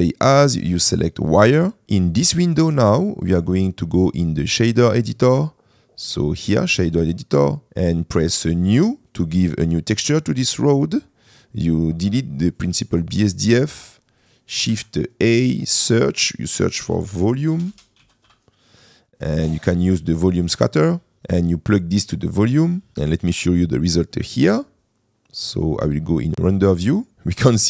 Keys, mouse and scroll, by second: 0.2-1.6 drag, 3.4-6.7 drag, 8.5 click, 11.2 middle click, 12.6 click, 13.8 Delete, 14.4 click, 14.7 shift+a, 17.8 BackSpace, 21.2 click, 22.9 click.